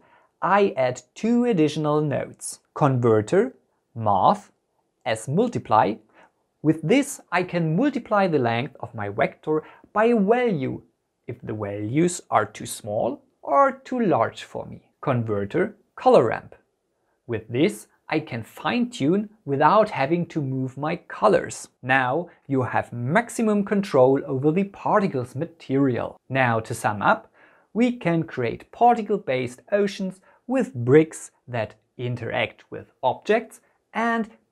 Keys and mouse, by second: 2.9 shift+a, 7.6-9.0 drag, 10.9 click, 11.9 click, 12.9 click, 14.9 shift+a, 18.7 click, 19.9 click, 21.2 click, 24.2 click, 28.7 click, 29.2 click, 29.7-31.0 drag, 31.3 click, 31.7-33.4 drag, 33.6 click.